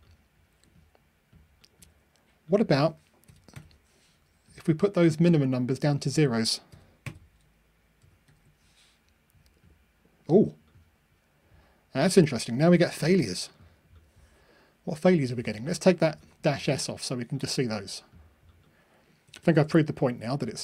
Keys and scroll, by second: 8.2 ctrl+r.